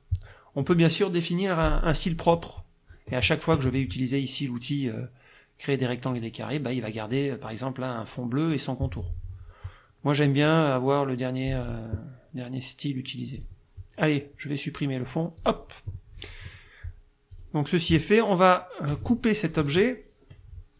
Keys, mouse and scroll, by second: 13.4 click, 15.4 click, 17.3 click.